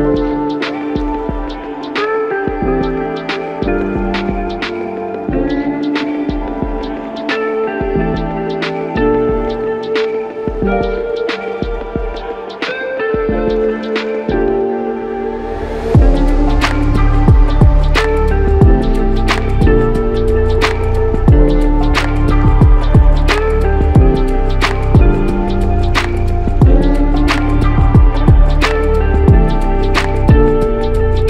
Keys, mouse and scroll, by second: 2.1 ctrl+click, 3.8 alt+click, 7.1 alt+click, 8.9 ctrl+click, 12.4 ctrl+click, 25.1 ctrl+click, 27.1 ctrl+click, 29.5 ctrl+click.